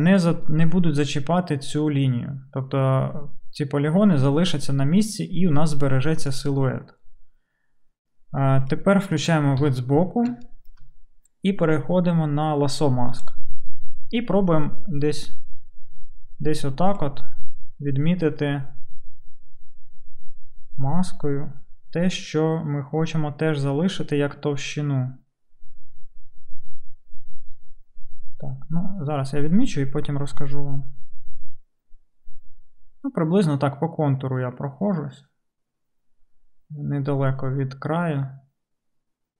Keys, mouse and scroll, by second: 9.6 KP_3.